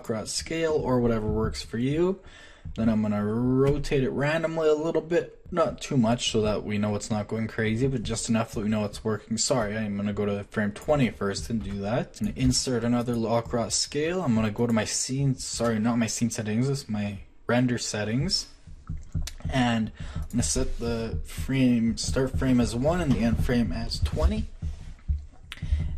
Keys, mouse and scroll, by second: 2.4 click, 3.6 r, 11.6 r, 12.4 i.